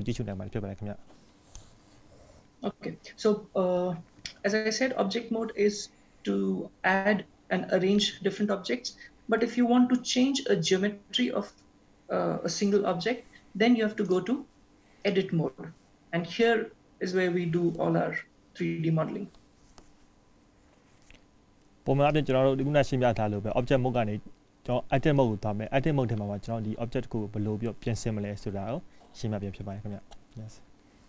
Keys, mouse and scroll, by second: 14.2 click, 22.1 click.